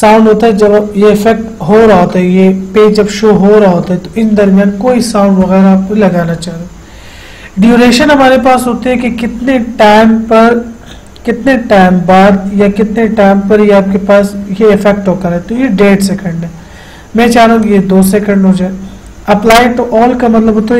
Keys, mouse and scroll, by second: 17.8 click.